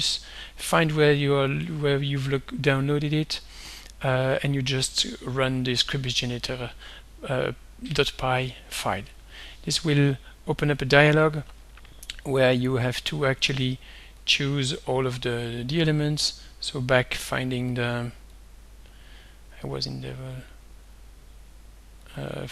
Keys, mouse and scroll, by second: 1.5 click, 3.3 click, 4.4 click, 9.1 click, 10.8-12.5 drag, 14.3 click, 16.8 click, 17.0-18.0 middle drag, 18.4-19.7 drag, 20.6 click, 22.1 click.